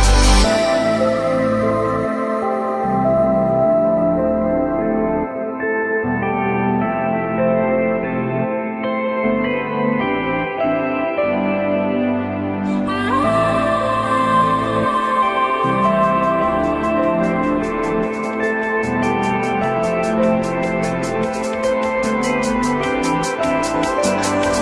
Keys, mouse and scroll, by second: 1.2 f, 1.8 z, 6.8 alt+middle click, 7.4 alt+scroll up 1, 7.6 alt+middle click, 8.4 alt+middle click, 8.5 alt+middle click, 9.2 alt+middle click, 9.3 alt+middle click, 9.6 f, 9.8 z, 14.8 alt+middle click, 17.2 alt+middle click, 17.9 alt+middle click, 18.0 alt+middle click, 18.1 alt+double middle click, 18.8 ctrl+z, 19.4 ctrl+z, 19.7 alt+middle click, 21.1 alt+middle click, 21.4 alt+middle click, 22.0 alt+middle click, 23.7 alt+middle click.